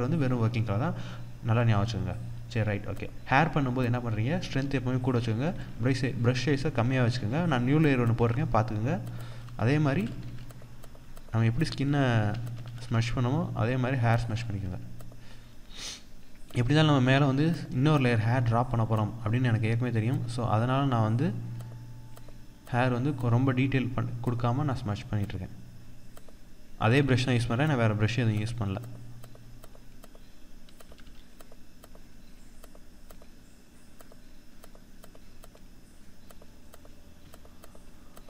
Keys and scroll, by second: 6.6 ctrl+=.